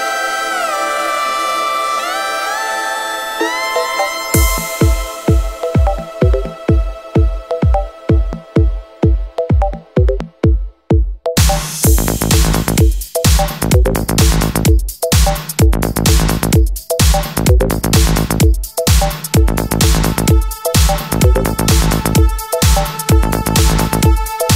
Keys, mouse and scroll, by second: 2.0 click, 2.1 middle click, 4.5 middle click, 6.1 click, 7.1 click, 8.7 click, 13.1 click, 13.9 middle click, 14.6 middle click, 14.8 scroll down 1, 15.8 F4, 17.2 click, 17.3 click, 18.2 alt+middle click, 19.5 alt+middle click, 19.6 scroll down 1, 20.5 alt+middle click, 22.1 click, 22.2 click, 24.5 click.